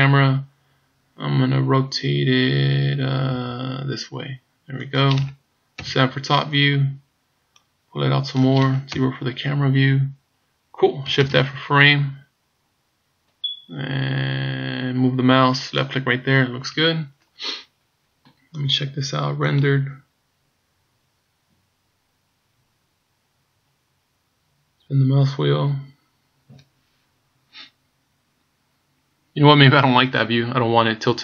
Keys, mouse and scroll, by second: 3.5 r, 5.8 KP_7, 6.5 scroll down 2, 7.7 click, 8.9 KP_0, 11.2 shift+f, 18.5 click, 19.8 click, 22.8-23.9 scroll up 1, 24.1 scroll up 2.